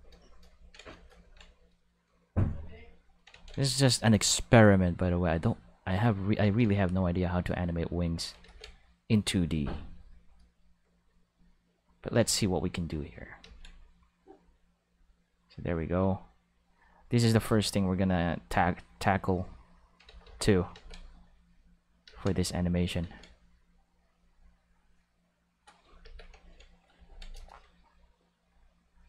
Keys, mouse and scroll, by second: 2.2 click, 3.3 ctrl+z, 3.5 click, 4.4 click, 5.5 click, 6.4 ctrl+z, 6.7 click, 7.6 click, 8.4 ctrl+z, 9.0 click, 11.2 click, 12.2 ctrl+z, 12.5 click, 13.4 ctrl+z, 13.8 click, 14.3-16.3 drag, 16.6 click, 17.4 ctrl+z, 17.7 click, 18.4 click, 19.2 click, 20.0 ctrl+z, 20.2 ctrl+z, 20.7 ctrl+z, 21.3 click, 22.0 ctrl+z, 22.4 click, 23.0 ctrl+z, 23.3 click, 24.1 click, 24.8 click, 26.0 ctrl+s, 28.3 click.